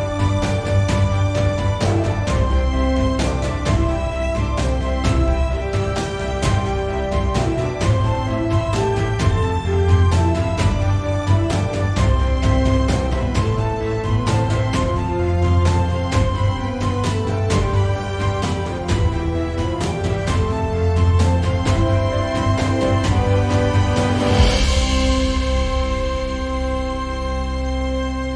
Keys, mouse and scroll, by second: 0.4 right click, 1.3 shift+middle click, 1.6 click, 1.9 r, 3.1 right click, 3.7 Tab, 5.2-8.1 shift+middle drag, 5.6-6.2 scroll up 2, 6.2-8.1 scroll down 2, 8.1 click, 8.4 x, 9.3 click, 10.3 shift+a, 10.9-11.3 scroll down 2, 11.3 g, 11.9 right click, 12.1 scroll up 1, 12.3 g, 13.1 right click, 13.6 alt+g, 14.4 s, 16.2 click, 16.3 `, 16.7 s, 18.4 click, 18.6 `, 20.6 drag, 21.0 scroll up 1, 21.6-23.9 drag, 24.4 click, 25.2 click, 25.4 scroll down 1, 26.4 click, 26.6-27.0 scroll down 1, 27.0 click, 28.2 scroll up 1.